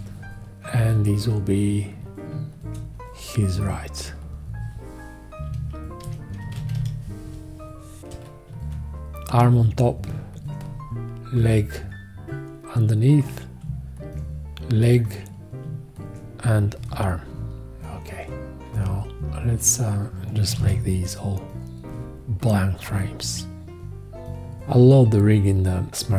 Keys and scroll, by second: 5.5-7.3 typing, 20.6 alt+z.